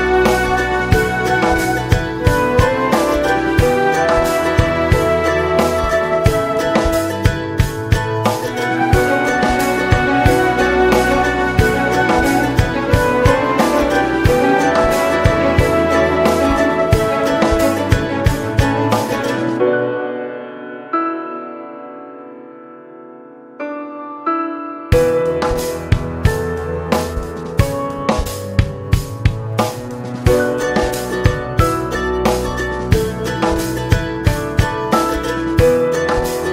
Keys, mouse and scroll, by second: 0.5 click, 1.0-2.4 scroll down 15, 2.6-9.1 drag, 9.1-10.3 middle drag, 10.3 click, 11.1 middle click, 11.5 space, 13.1 scroll down 2, 13.4-14.5 middle drag, 14.5 space, 15.1 click, 15.5 middle click, 15.9 space, 18.3 middle click, 18.8 space, 20.0-27.1 drag, 27.1-28.6 scroll up 9, 28.6-35.4 drag, 35.4 scroll down 3, 35.6-36.5 middle drag.